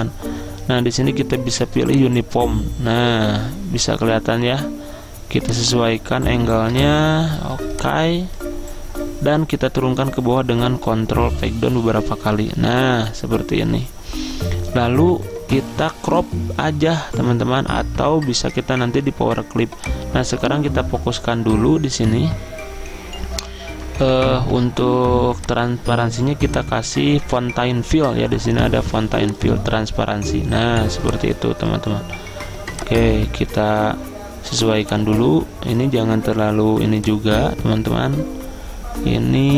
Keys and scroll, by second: 11.0 ctrl+Page_Down, 11.4 ctrl+Page_Down, 11.6 ctrl+Page_Down, 12.6 ctrl+Page_Up.